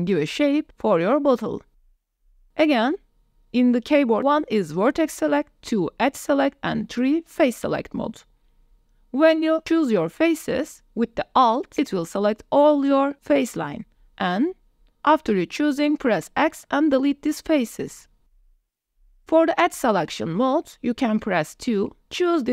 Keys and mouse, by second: 0.5 click, 0.9 click, 1.6 3, 2.6 1, 4.0 2, 5.4 3, 6.1 click, 7.5 shift+click, 7.8 click, 8.3 click, 8.9 click, 10.0 click, 11.0 alt+click, 11.5-13.2 drag, 13.8 click, 14.4 middle click, 16.7 alt+shift+click, 17.4 x, 20.2 click, 20.9 shift+click, 21.2 middle click, 22.2 2.